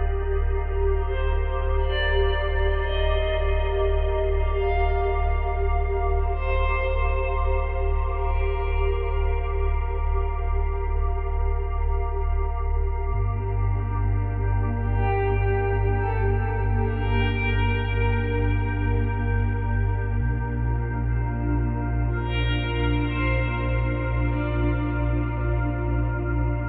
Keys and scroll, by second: 4.1 space, 5.8 space, 6.5 space, 7.7 space, 11.0 space, 15.6 space, 19.3 space, 20.0 space, 24.6 space.